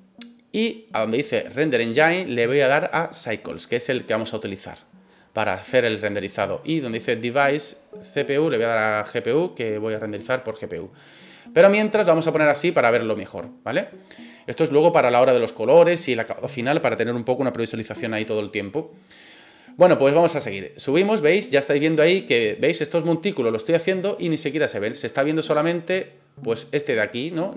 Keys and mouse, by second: 2.0-3.2 drag, 7.6-9.7 drag, 12.4 click, 20.5-22.6 drag, 25.4 ctrl+z, 26.2 right click, 26.9 click.